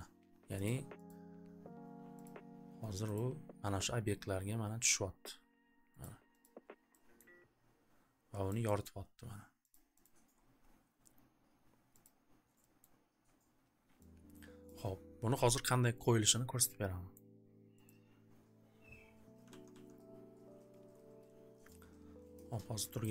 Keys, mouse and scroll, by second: 0.6 click, 1.1 click, 2.2 click, 3.1 click, 6.0 click, 6.4 click, 7.1 scroll, 8.2-8.8 scroll, 9.6-10.6 scroll, 9.7 click, 10.0 click, 12.0 click, 12.0 scroll, 12.8 click, 14.6 click, 14.9 scroll, 16.3 scroll, 17.1 click, 17.8 click, 19.6 alt+ц, 19.7 alt+ц, 23.0 click.